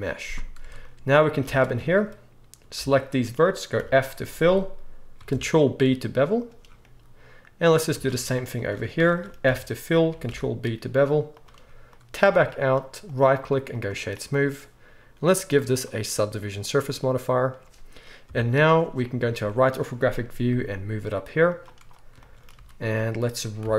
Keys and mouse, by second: 0.6 Tab, 1.4 alt+a, 2.0-7.3 right drag, 3.8 f, 5.3 ctrl+b, 7.3-9.0 drag, 7.9 alt+a, 9.0-15.7 shift+right drag, 9.4 f, 10.3 ctrl+b, 12.2 Tab, 15.7-19.7 middle drag, 18.2 KP_3, 20.1-21.6 middle drag, 20.5 g, 21.6-23.7 right drag, 22.5 z, 23.6 r.